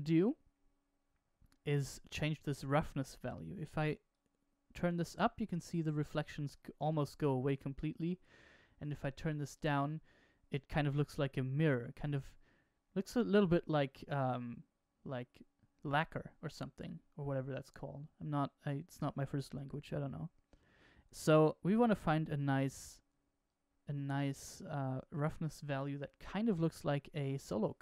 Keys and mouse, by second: 2.0-4.0 drag, 8.4 click, 20.9 click, 23.4 click.